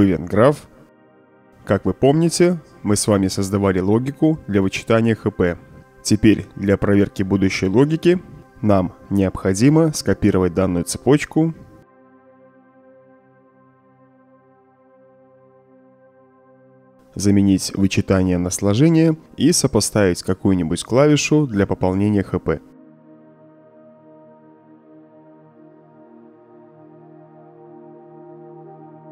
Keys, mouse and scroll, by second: 1.1-1.5 right drag, 1.9-2.3 middle drag, 2.3-2.8 right drag, 3.0 middle click, 3.3-3.9 right drag, 4.2 middle click, 4.7-5.2 right drag, 7.1 ctrl+click, 7.7 ctrl+click, 8.4 ctrl+click, 9.0 ctrl+click, 9.8 ctrl+click, 10.3 ctrl+click, 11.1 ctrl+click, 12.2 ctrl+c, 12.5 right drag, 13.1 middle drag, 13.4 right click, 14.0 click, 15.8 click, 16.6 click, 18.8-19.3 drag, 20.3 shift+=, 20.7 Return, 22.3-23.4 drag, 24.2 click, 26.1 Return, 27.9-28.5 drag, 28.9 right drag.